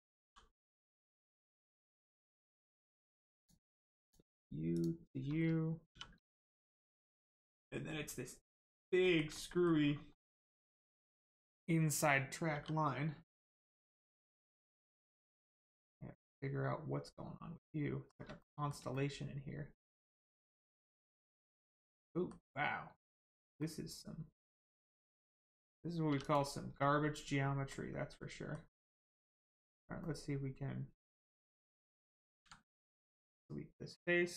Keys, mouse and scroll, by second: 0.2 g, 2.4 right click, 3.3 click, 4.7 shift+click, 5.9 shift+r, 6.5 click, 6.9 scroll down 1, 7.5 middle click, 9.0 shift+middle click, 9.3 middle click, 9.4 middle click, 9.8-10.1 scroll up 1, 10.1 middle click, 11.0 click, 12.5 l, 13.2 click, 13.6 shift+middle click, 18.4 middle click, 18.9 shift+middle click, 22.6 scroll down 1, 23.0 scroll up 1, 23.6 middle click, 25.1 click, 26.8 scroll down 1, 27.6 middle click, 28.6-28.9 scroll up 1, 28.9 middle click, 29.4-29.8 scroll up 1, 30.0 middle click, 33.1 click.